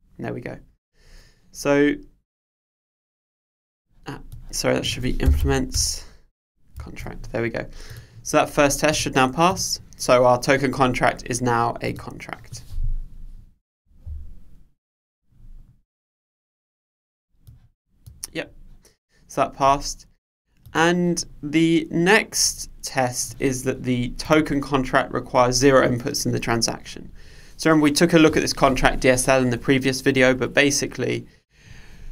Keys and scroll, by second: 5.8 Return, 6.9 super+s.